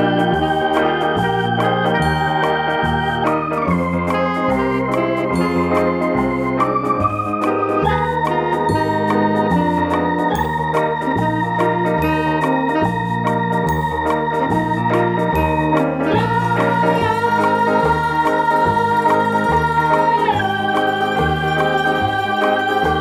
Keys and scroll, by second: 8.0 BackSpace.